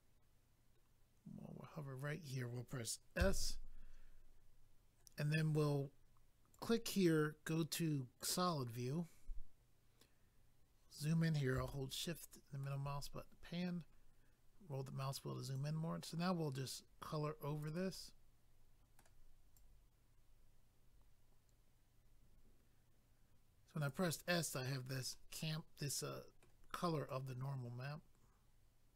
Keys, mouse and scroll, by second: 6.5 click, 6.6 click, 8.2 click, 8.3 click, 10.6-11.6 scroll up 1, 11.6 scroll up 2, 11.7 shift+middle click, 13.3-14.3 scroll up 1, 15.5 click, 17.9 middle click, 19.5 click, 25.1 middle click, 27.1 click.